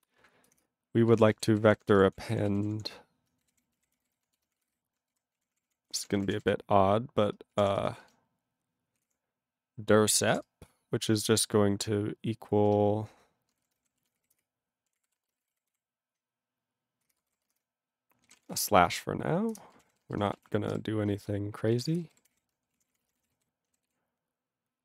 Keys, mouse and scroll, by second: 0.6 Return, 0.9-8.7 typing, 5.9 ctrl+o, 5.9 Tab, 11.0 space, 12.7-22.2 typing, 17.1 Return, 18.6 ctrl+e, 21.8 ctrl+n, 22.0 Return, 23.0 ctrl+space, 23.0 ctrl+n, 23.1 ctrl+n, 23.2 ctrl+e, 23.3 ctrl+g, 23.9 ctrl+s.